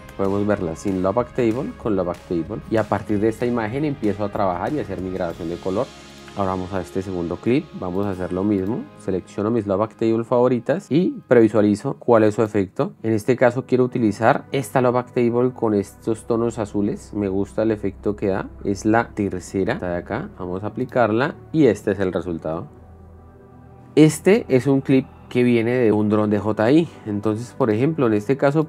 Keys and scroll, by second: 11.8 shift+f, 12.9 space, 19.5 shift+f, 21.8 p, 22.3 space.